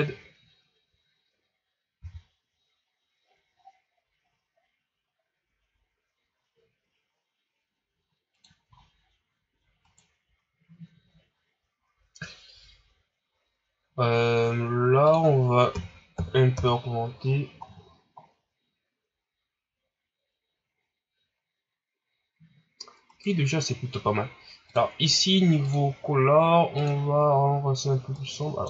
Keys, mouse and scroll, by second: 2.0 r, 8.7 scroll up 7, 9.8 right click, 13.3-15.2 scroll down 4, 15.2-17.6 drag, 17.6-18.2 scroll down 3, 18.2-21.5 scroll up 2, 23.1 right click, 25.3 click, 26.0 click.